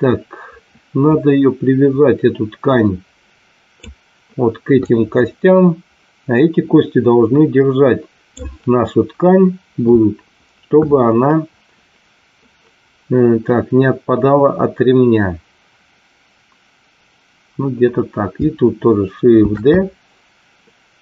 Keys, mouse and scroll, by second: 4.8-8.3 drag, 19.4 shift+d.